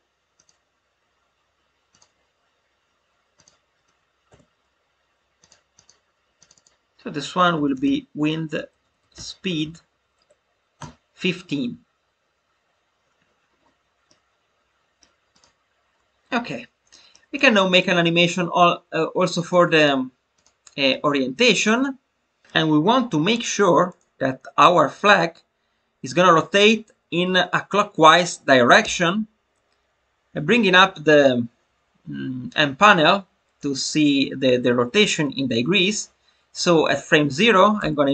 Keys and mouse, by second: 0.4-2.0 drag, 3.3 click, 4.2 Delete, 5.3 click, 5.7 click, 6.3 click, 6.5-13.2 drag, 14.0-15.0 middle drag, 15.3 drag, 16.8 shift+middle click, 17.3 click, 17.7 click, 18.2 click, 19.3 click, 28.7 n.